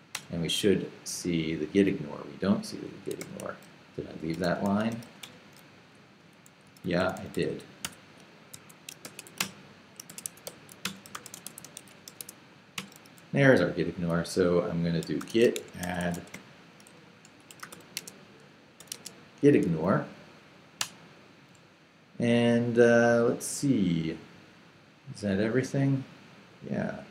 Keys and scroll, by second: 0.1 Return, 3.2-7.5 typing, 8.5 Escape, 8.8-12.7 typing, 12.8 Return, 14.8-18.8 typing, 18.9 Tab, 20.8 Return.